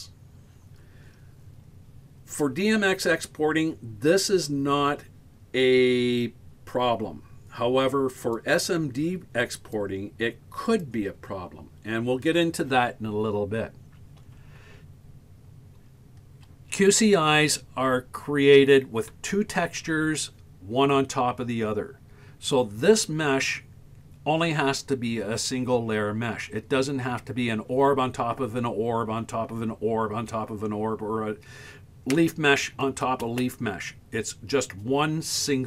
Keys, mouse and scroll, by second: 1.9-3.0 scroll up 2, 8.2 right click, 9.6 right click, 10.7 right click, 15.4 scroll up 1, 15.8-19.5 scroll down 1.